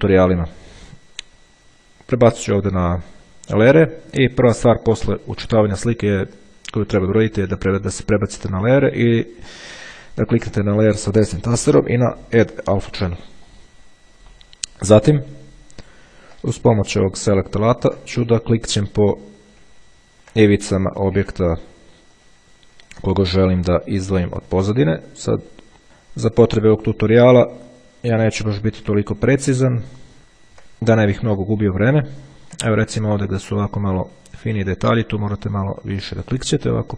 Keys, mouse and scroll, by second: 2.6 click, 7.2 click, 10.6 right click, 13.0 click, 15.9-16.6 ctrl+scroll up 3, 17.4-18.0 ctrl+scroll down 1, 18.5 ctrl+click, 20.0-20.5 ctrl+scroll up 2, 20.5 ctrl+scroll up 1, 21.4 click, 22.4-23.8 drag, 24.8 click, 25.6 click, 26.9 click, 27.9 click, 28.6 click, 30.0 click, 30.2-30.8 ctrl+scroll up 1, 31.5 click, 32.7 ctrl+scroll down 1, 34.7-36.0 drag, 36.2 click.